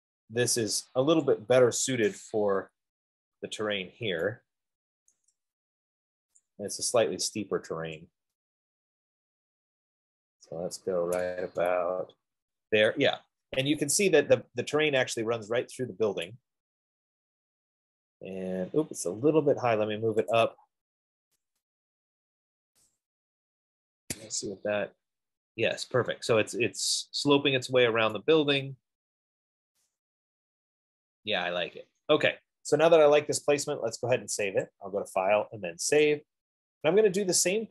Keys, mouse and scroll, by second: 1.5 click, 2.4 middle click, 2.8 Escape, 4.1 middle click, 5.5 right click, 5.9 middle click, 6.8 click, 10.7 click, 11.8 Escape, 13.7 middle click, 16.5 right click, 16.9 middle click, 17.1 middle click, 17.9 middle click, 18.0 middle click, 18.1 middle click, 19.8 middle click, 19.9 middle click, 20.6 click, 21.7 scroll, 23.0 click, 23.9-24.4 scroll, 24.6 Escape, 25.4 middle click, 27.9 middle click, 29.8 middle click, 29.9 right click, 30.8-31.2 scroll, 31.8 scroll, 33.2 F15, 34.9 click, 35.3 middle click, 36.4 click.